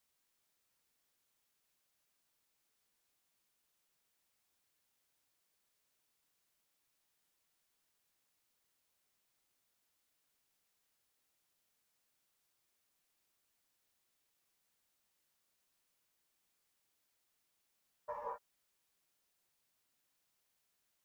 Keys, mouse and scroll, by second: 0.0-1.8 drag, 4.0-6.0 middle drag, 6.0-6.5 scroll up 1, 6.5 scroll up 1, 6.6-8.5 drag, 6.6-8.1 middle drag, 10.4-12.3 drag, 12.5-14.3 drag, 14.5-15.7 middle drag, 15.7-17.6 drag.